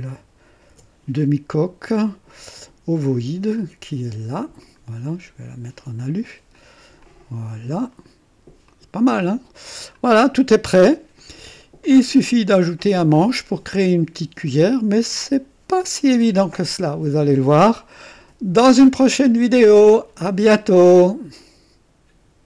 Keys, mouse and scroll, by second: 0.7 ctrl+d, 3.5 click, 4.6 click, 5.9 click, 6.5 click, 7.0 click, 7.9 middle click, 8.0 right click, 8.2 middle click, 8.7-10.2 drag, 10.2 click, 11.2 right click, 11.8 click, 13.1 click, 14.5-15.0 right drag, 16.2-20.2 drag, 21.4 right click.